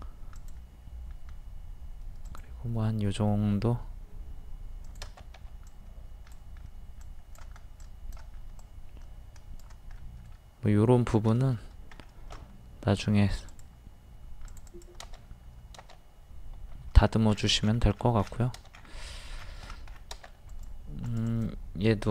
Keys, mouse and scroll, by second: 0.4-10.0 drag, 5.4 e, 10.0-11.1 middle drag, 11.6 scroll up 1, 12.3 a, 13.5 click, 17.0 click, 17.0 a, 17.1 scroll down 1, 17.6 scroll up 1, 17.9-18.3 scroll down 1, 18.7 scroll up 1, 19.4-20.0 scroll down 1, 20.5 click.